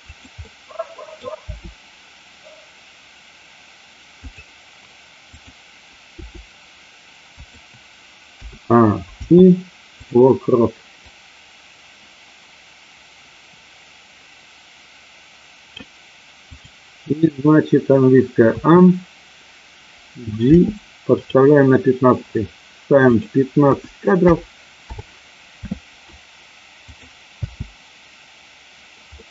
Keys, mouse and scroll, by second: 0.0 click, 0.5 middle click, 1.5 r, 4.1 click, 5.2 click, 6.1 r, 8.4 a, 10.1 i, 11.1-15.8 drag, 16.5 click, 18.5 a, 20.4 g, 21.1 click, 23.1-24.9 drag, 26.9 click, 27.4 space, 29.1-29.3 middle drag.